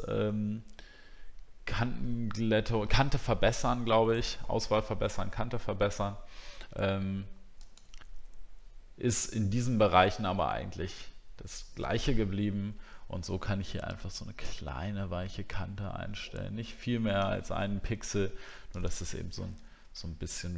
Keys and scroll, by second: 20.0 alt+scroll up 1.